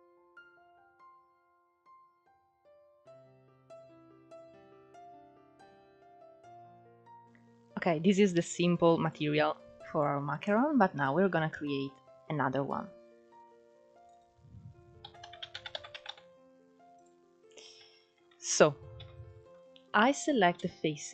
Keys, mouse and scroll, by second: 4.9-5.5 scroll down 2, 5.5-6.5 middle drag, 6.5-8.6 scroll up 1, 8.6-10.5 drag, 10.5-10.9 scroll up 1, 10.9-13.5 middle drag, 13.5-16.6 drag, 19.8 middle click.